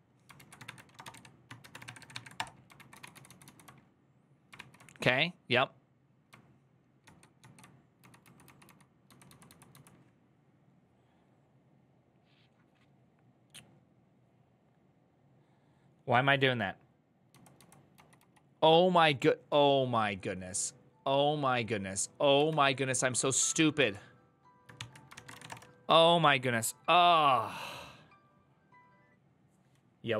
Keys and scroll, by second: 0.1 ctrl+a, 0.5-3.2 typing, 4.3 ctrl+j, 4.3 ctrl+k, 6.8 ctrl+-, 7.2 ctrl+-, 7.8-9.5 typing, 22.3 ctrl+o, 23.0-25.6 typing.